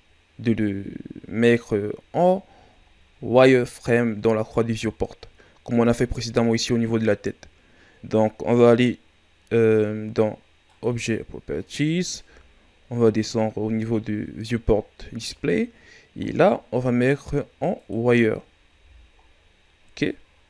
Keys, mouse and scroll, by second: 0.7 scroll down 2, 1.2-1.7 scroll down 3, 1.7-2.4 scroll up 2, 2.5-2.9 scroll down 2, 2.9 shift+scroll up 2, 4.4-5.0 scroll up 1, 10.6 click, 11.5-13.2 scroll down 15, 16.2-18.7 drag, 18.7 a.